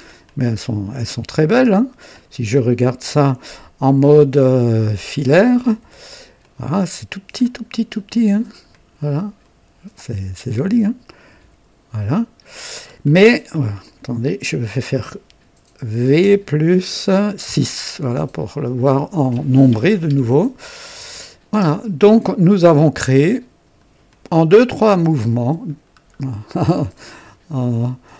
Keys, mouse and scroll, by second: 0.2-2.3 drag, 5.7 &, 6.3-7.5 drag, 7.6-8.1 scroll up 1, 8.1 right click, 8.5-9.5 typing, 8.7 click, 11.0 click, 11.4 typing, 12.0 click, 12.8 scroll down 1, 13.2 right click, 13.5 typing, 13.8 click, 16.1-17.5 typing, 18.7 click, 19.1-20.0 typing, 19.5-20.6 drag, 21.1 click, 21.5-22.7 typing, 22.1 click, 22.7 click, 24.1 click, 24.1-24.6 typing, 25.8-26.2 scroll down 1, 26.6-28.1 drag, 27.2 typing.